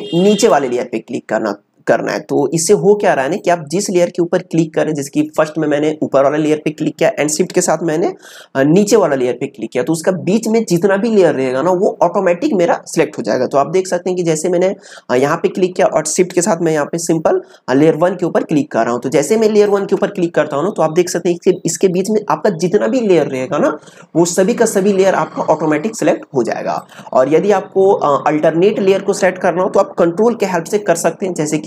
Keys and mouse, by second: 0.1 shift+click, 15.1 click, 26.7 click.